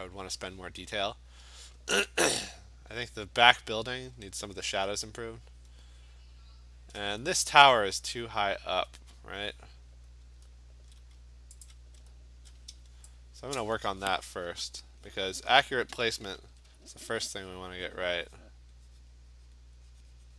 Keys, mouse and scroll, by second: 4.7-5.3 scroll, 6.4-6.8 scroll, 8.2-8.8 scroll, 9.5-10.7 scroll, 11.7 alt+click, 12.1 scroll, 13.3-13.7 scroll, 13.7 click, 15.7 alt+click, 16.6-17.3 typing, 17.7 click, 18.2 click, 18.5 click, 18.6 alt+click, 19.6 click.